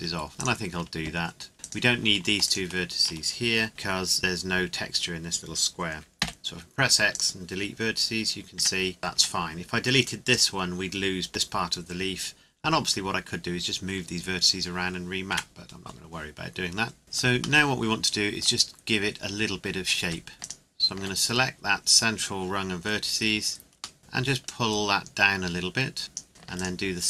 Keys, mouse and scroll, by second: 0.4 right click, 2.4 shift+right click, 6.2 x, 7.1 click, 8.6 Tab, 9.6 Tab, 10.3 right click, 15.3 Tab, 17.0 click, 17.6 middle click, 18.7 scroll up 1, 20.0 Tab, 20.4 alt+right click, 24.0 middle click, 24.4 click, 26.6 alt+right click.